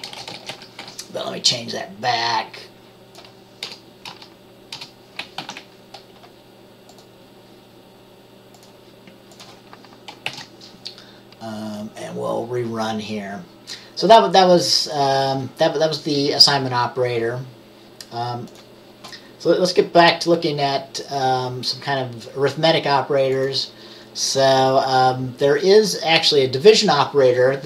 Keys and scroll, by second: 3.7 BackSpace, 5.4 ctrl+s, 10.4 ctrl+b.